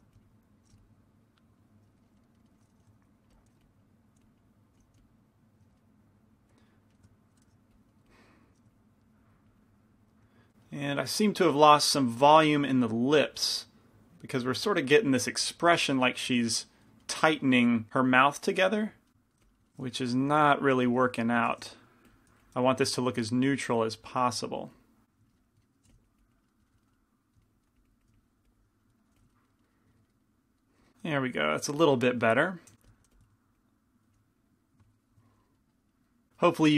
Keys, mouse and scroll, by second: 0.7 f, 2.1-3.4 middle drag, 3.0-5.0 typing, 3.9-5.7 drag, 5.7 middle click, 7.5 shift+c, 7.5 shift+f, 8.1 f, 8.8-10.5 drag, 10.5-14.0 middle drag, 14.0-16.4 drag, 16.5 click, 16.8-19.2 middle drag, 19.5 f, 21.0 f, 21.0 i, 21.7 shift+f, 22.5 f, 23.1-25.7 drag, 25.5 middle click, 26.0 f, 26.1 click, 27.8-29.3 drag, 29.3 f, 32.8 g, 32.8 f, 33.2 f, 33.6-36.7 drag, 34.2 f.